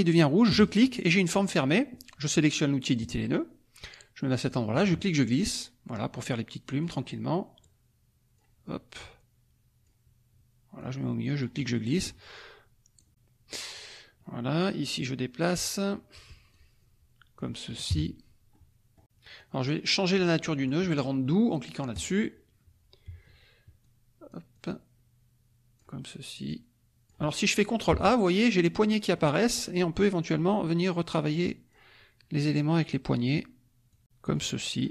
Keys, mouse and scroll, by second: 0.5 click, 3.0 click, 4.4-5.8 drag, 6.2 click, 7.6 click, 8.9-10.0 drag, 10.7 click, 11.5 middle click, 11.5-12.0 scroll up 1, 12.9 click, 14.8 click, 16.5-17.7 drag, 17.9 KP_Subtract, 18.5 click, 19.3 click, 20.1 click, 21.9 click, 23.8-26.0 drag, 26.4-27.8 drag, 27.9 ctrl+a, 28.9 click, 29.8 click, 31.0 click, 32.4 click, 33.9 click, 34.3-34.9 drag.